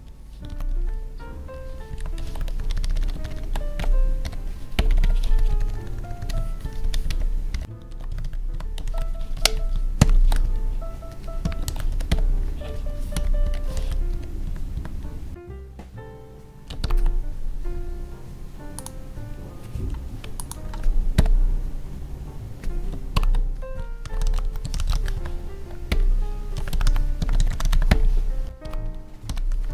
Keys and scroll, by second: 1.8 Tab, 2.2 ctrl+s, 2.5 Left, 3.2 ctrl+Left, 5.3 Down, 8.5 Tab, 8.8 ctrl+s, 9.3 ctrl+shift+Left, 10.2 ctrl+s, 10.4 Right, 11.6 ctrl+s, 11.8 Right, 12.7 Up, 13.7 ctrl+s, 14.1 Down, 14.4 Tab, 16.8 ctrl+b, 23.0 Tab, 23.1 ctrl+b, 25.1 Tab, 27.7 Tab, 29.6 Tab.